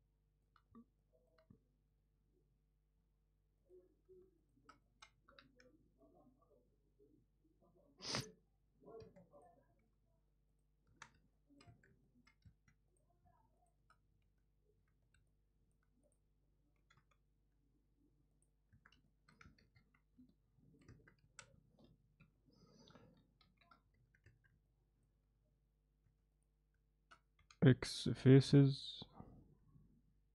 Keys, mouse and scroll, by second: 1.0 middle click, 4.9 alt+middle click, 5.4 j, 6.0-8.1 middle drag, 11.0 Tab, 11.4 alt+middle click, 11.9 Tab, 12.1 alt+middle click, 12.5 1, 14.3 z, 15.2 z, 15.3 middle click, 16.8 g, 18.8 Tab, 19.1 middle drag, 19.7 ctrl+2, 20.4-20.8 alt+middle drag, 20.9 Tab, 21.3 a, 22.3 shift+n, 24.0 Tab, 24.7 alt+middle click, 26.1 3.